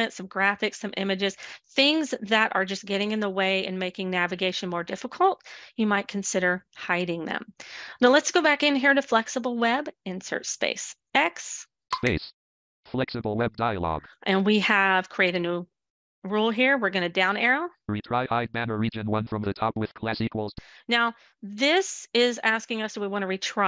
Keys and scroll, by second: 6.9 space, 9.8 x.